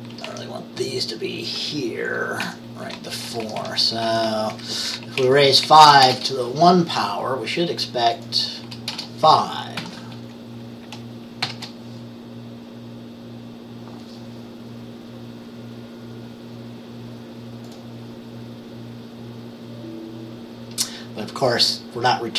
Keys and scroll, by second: 0.2 Down, 0.3 Down, 2.5 ctrl+v, 3.1 Down, 3.2 Down, 3.4 Down, 3.5 Down, 4.1 ctrl+v, 4.6 Up, 5.1 Down, 5.3 Left, 5.7 Left, 6.1 BackSpace, 9.0 BackSpace, 9.9 ctrl+s, 11.5 ctrl+b.